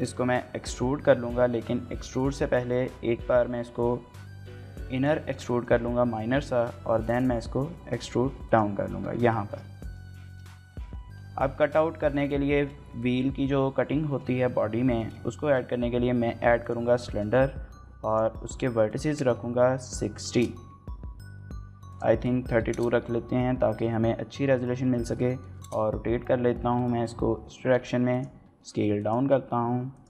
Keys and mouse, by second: 0.0 middle click, 0.5 middle click, 1.1 middle click, 4.9 click, 5.2 shift+middle click, 5.5 middle click, 6.6 e, 8.5 click, 8.9 Tab, 9.5 shift+middle click, 9.7 middle drag, 10.2-10.5 shift+middle drag, 11.4 shift+middle click, 12.5 shift+middle drag, 12.9 middle click, 14.1 shift+middle click, 14.4 middle click, 14.8 shift+middle click, 15.0 middle click, 15.4 shift+a, 17.1 shift+middle click, 18.2 shift+a, 18.9-20.8 drag, 21.9-23.1 drag, 23.8-25.4 typing, 25.6 KP_Enter, 26.7-30.0 typing, 28.1 click, 29.0 click, 29.9 click.